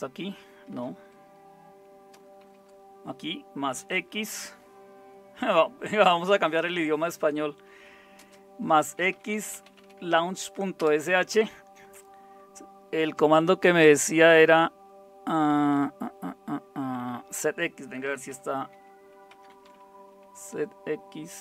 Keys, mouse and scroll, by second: 0.7 typing, 2.5 typing, 4.1 typing, 8.2-10.2 typing, 10.8 Return, 17.8-20.1 typing, 20.2 Tab.